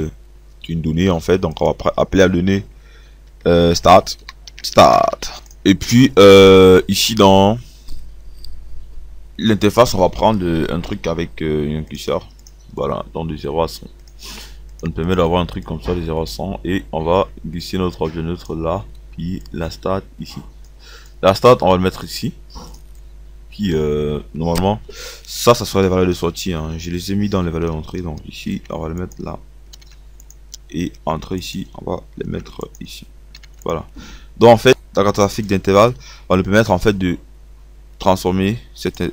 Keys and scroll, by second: 28.2 ctrl+x, 30.3 ctrl+v, 32.3 ctrl+x, 33.4 ctrl+v.